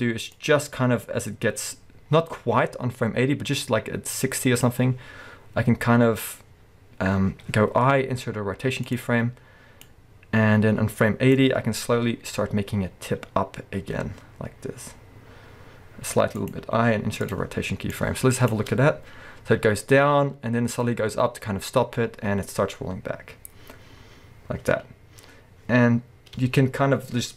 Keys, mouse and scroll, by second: 0.3-16.5 drag, 7.9 i, 12.3 r, 16.6 i, 18.0-27.3 drag, 18.5 space.